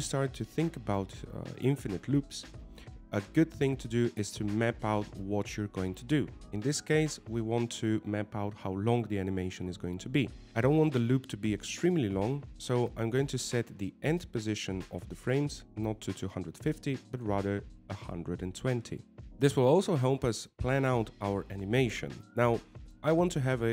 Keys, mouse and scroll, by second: 17.0 click.